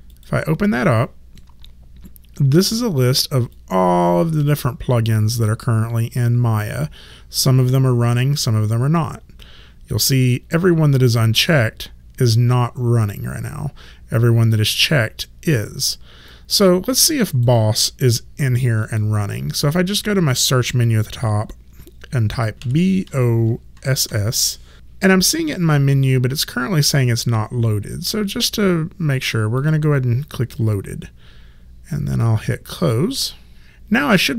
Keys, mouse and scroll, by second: 0.1 click, 3.5 click, 16.3 click, 18.9 click, 22.6 b, 23.1 o, 23.8 s, 29.6 click, 32.7 click.